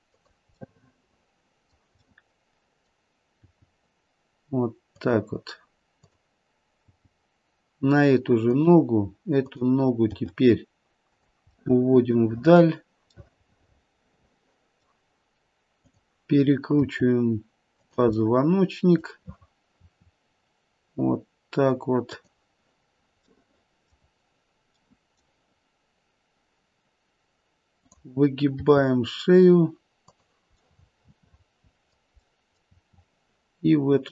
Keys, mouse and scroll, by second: 0.6 middle click, 1.0 middle click, 1.3 middle click, 1.9 middle click, 3.4 g, 5.9 click, 6.7 g, 9.4 click, 11.6 middle click, 11.6 g, 13.3 middle click, 14.7 middle click, 15.8 click, 16.8 r, 18.2 middle click, 18.4 middle click, 19.7 r, 23.3 middle click, 23.5 middle click, 24.7 middle click, 28.5 click, 28.5 r, 30.7 middle click, 31.4 middle click, 31.7 middle click, 32.2 middle click, 32.6 r.